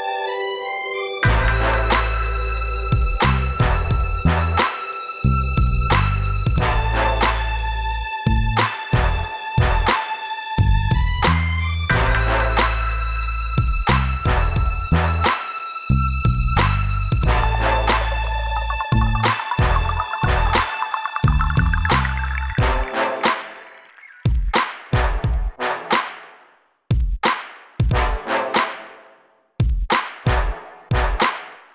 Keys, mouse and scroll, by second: 4.1 click, 6.1 b, 6.6 scroll down 2, 7.9-8.2 scroll up 2, 9.2 click, 10.3 click, 12.0 click, 12.1 click, 12.5 click, 12.6 click, 13.1 scroll down 2, 13.7 scroll up 1, 15.6 click, 19.5 click, 20.2 click, 20.9 click, 20.9 middle click, 24.9 click, 29.5 right click, 29.5 right click, 31.3 click.